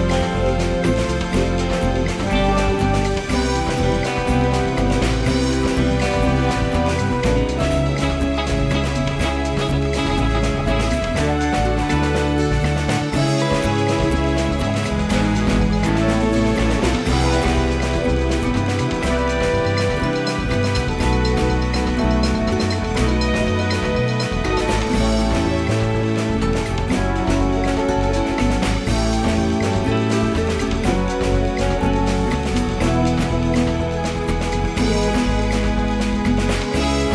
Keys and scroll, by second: 6.2 space, 8.3 space, 9.1 space, 9.7 ctrl+z, 13.6 space, 16.8 space, 17.4 space, 25.4 space, 26.3 space, 29.0 ctrl+z, 30.2 space, 32.4 space, 36.3 space.